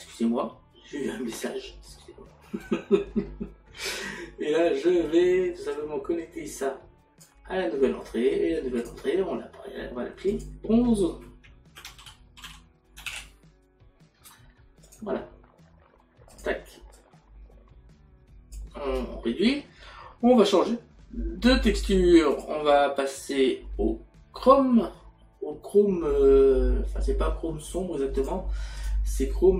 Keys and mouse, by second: 5.7 click, 11.0 click, 12.0 r, 14.9 click.